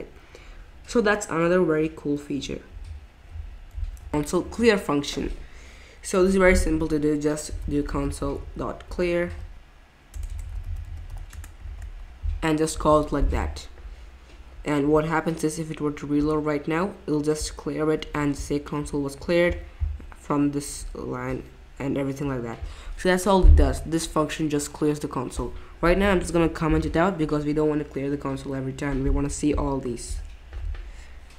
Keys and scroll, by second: 4.4 Return, 7.2-11.6 typing, 26.4 super+/.